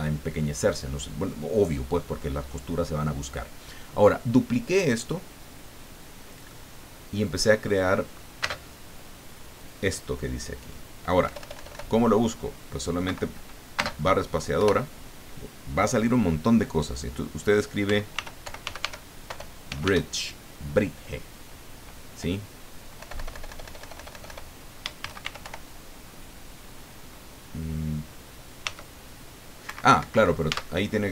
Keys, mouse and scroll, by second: 6.4 middle click, 6.8 click, 7.0 middle click, 8.4 space, 11.2 BackSpace, 13.0 Escape, 13.7 space, 14.6 BackSpace, 17.8 b, 18.1 r, 19.3 BackSpace, 19.7 g, 19.8 e, 22.9 BackSpace, 25.0 shift+b, 25.2 shift+r, 25.4 shift+i, 28.6 d, 29.6 Escape, 30.4 Tab.